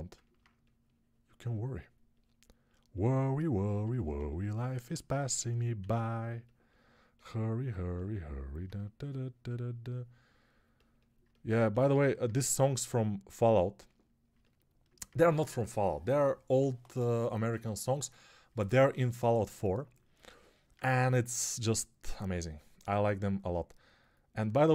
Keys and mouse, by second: 4.2 alt+shift+click, 4.2 alt+shift+right click, 5.6 s, 24.0 right click.